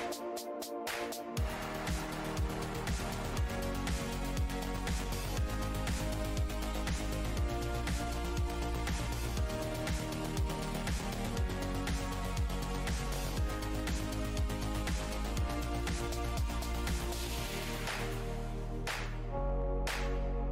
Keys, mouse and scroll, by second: 0.1 scroll up 2, 1.0 shift+click, 2.0 ctrl+click, 2.8 scroll up 1, 2.8 w, 3.6 click, 4.9 w, 5.7 z, 6.5 click, 7.1 scroll down 1, 8.1 alt+click, 9.3 right click, 10.1 shift+right click, 10.7 scroll down 1, 10.7-12.3 typing, 12.8 click, 14.7 click, 15.6 click, 20.2 click, 20.4 Delete.